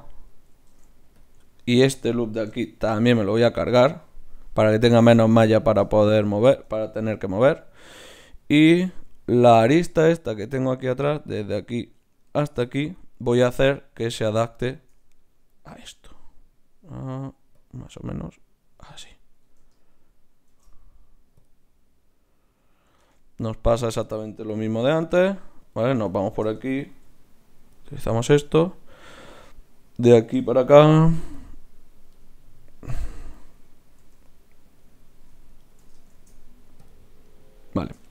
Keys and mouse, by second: 0.7 ctrl+Tab, 2.8 ctrl+x, 7.0 KP_Divide, 8.7 z, 10.2-11.8 middle drag, 11.8-13.5 right drag, 12.4 z, 12.6 click, 13.5-17.4 middle drag, 17.4 d, 17.5-20.5 drag, 20.5 shift+q, 23.0 ctrl+Tab, 23.8-25.6 right drag, 24.5 g, 25.7-27.5 drag, 26.3 shift+Tab, 26.9 g, 29.4-30.7 drag, 30.7 shift+q, 34.0 g, 36.1 shift+q.